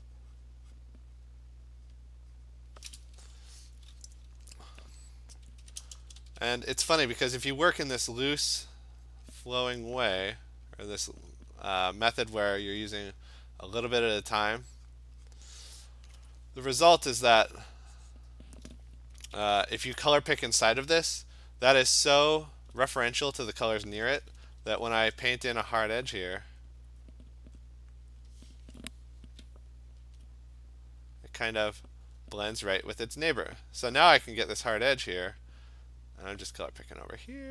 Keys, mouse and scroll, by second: 0.5 click, 0.8 click, 2.0 click, 2.6 click, 5.7-6.5 typing, 7.9 alt+click, 8.9 click, 9.1 click, 9.2 alt+click, 9.4 click, 10.3 click, 10.4 alt+click, 10.5 click, 11.1 click, 11.3 click, 12.3 alt+click, 12.7 click, 13.0 click, 14.0 click, 14.2 click, 14.5 click, 15.0 click, 15.3 click, 17.3 click, 17.7 click, 18.2 click, 19.2 ], 19.4 ], 19.6 ], 22.7 alt+click, 23.2 alt+click, 24.5 [, 24.7 [, 24.9 [, 25.1 [, 26.6 click, 27.6 click, 27.7 alt+click, 28.3 click, 30.2 alt+click, 30.3 alt+click, 31.0 click, 32.2 click, 32.6 alt+click, 34.9 click, 36.4 alt+click.